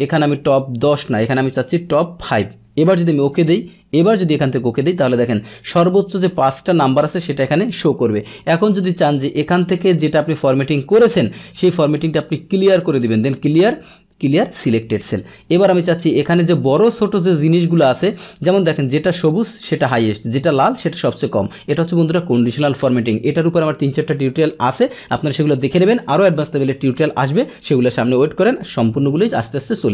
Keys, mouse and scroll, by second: 0.1 click, 2.8 click, 4.2 click, 4.9 middle click, 8.6-11.2 drag, 11.9 click, 14.5 click, 15.8 click, 18.1 click, 19.1 click, 19.8 click, 20.5 click.